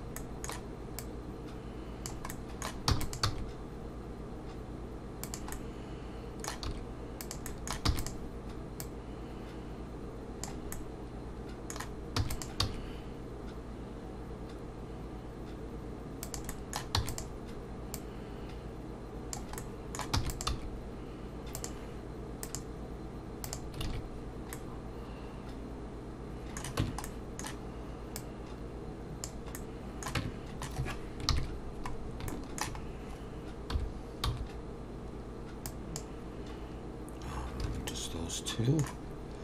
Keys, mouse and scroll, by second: 0.2 middle click, 1.0 click, 2.3 middle click, 2.9 e, 3.2 s, 5.5 middle click, 6.7 s, 7.5 middle click, 7.9 e, 8.8 click, 10.7 middle click, 12.2 e, 12.6 s, 16.5 middle click, 17.0 e, 17.9 click, 19.6 middle click, 20.1 e, 20.5 s, 22.4 click, 23.9 alt+a, 24.5 middle click, 26.8 Tab, 27.0 middle click, 28.2 click, 29.5 middle click, 30.2 Tab, 31.3 ctrl+KP_3, 32.1-32.6 scroll up 2, 32.3 shift+middle click, 32.8-33.2 scroll up 2, 33.7 3, 34.2 c, 37.9 middle click.